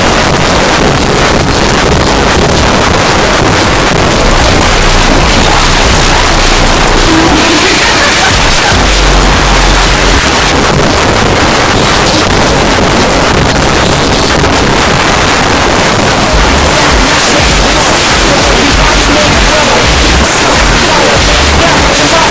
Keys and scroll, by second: 10.2 Page_Down, 22.2 space.